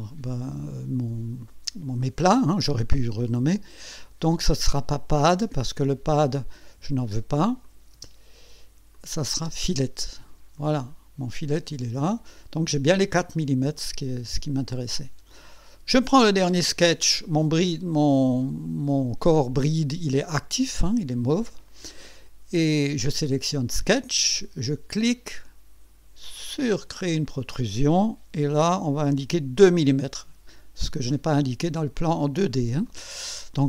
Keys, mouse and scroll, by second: 4.8 click, 5.3 space, 7.6 click, 7.9 space, 9.0 click, 9.3 space, 10.6 click, 11.6 click, 13.8-15.1 drag, 15.7 click, 26.2 click, 29.7 KP_2, 31.9 click, 32.8 click.